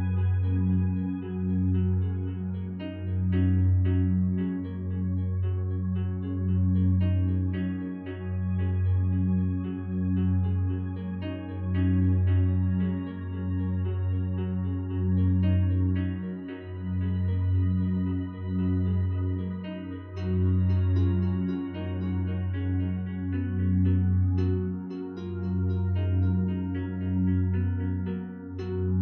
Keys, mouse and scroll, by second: 0.4 F9, 14.6 2, 14.7 Return.